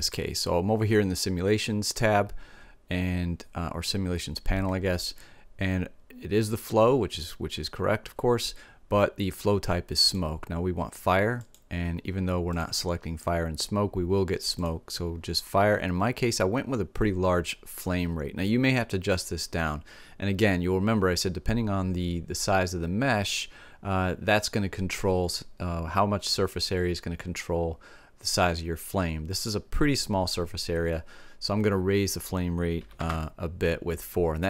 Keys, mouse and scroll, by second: 0.5 middle click, 10.0-12.3 drag, 12.5-14.4 drag, 19.1-20.9 drag.